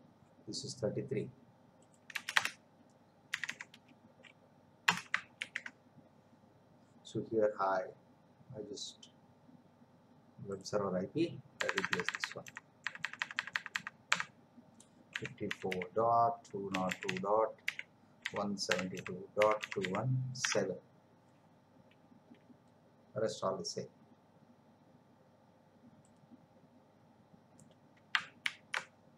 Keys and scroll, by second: 2.1 Return, 3.3 3, 4.9 Return, 5.4 ctrl+v, 11.6 BackSpace, 15.1 5, 28.4 ctrl+c.